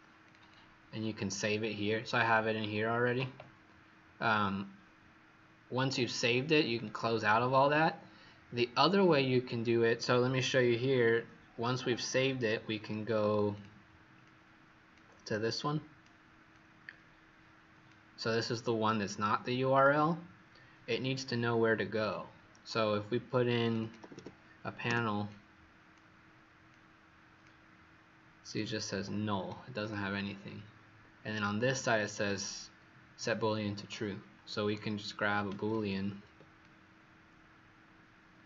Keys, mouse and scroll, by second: 0.2 click, 0.3 click, 5.7 click, 23.7 click, 24.0 typing, 24.8 Return, 25.2 click, 35.6 ctrl+c, 36.5 click.